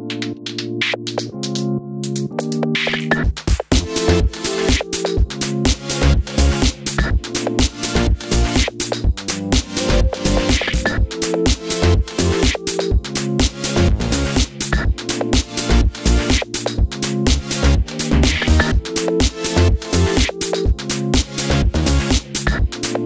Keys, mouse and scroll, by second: 0.5-3.2 drag, 1.9 KP_Enter, 3.2-6.4 middle drag, 6.4 click, 6.6 Tab, 6.9 a, 9.0 z, 9.2-10.7 shift+middle drag, 9.3-9.8 scroll up 2, 9.8 shift+d, 10.7 click, 10.8 shift+d, 11.8 click, 12.0-13.2 middle drag, 12.1 scroll down 2, 12.6 z, 13.2 Tab, 13.9 g, 14.4 click, 14.5 middle click, 14.9 g, 16.2 click, 17.4 scroll down 1, 17.7 middle click, 18.8 click, 19.3 shift+click, 19.6 ctrl+j, 20.9 shift+c, 21.3 KP_Decimal, 22.5 right click.